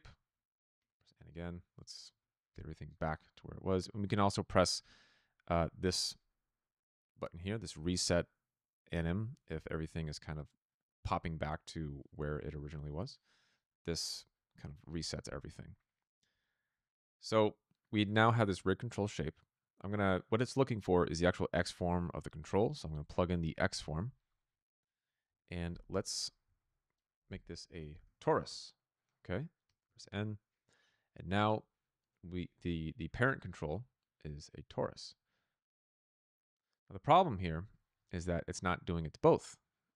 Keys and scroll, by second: 0.9 n, 25.6 p, 27.7-28.4 typing, 29.8 n.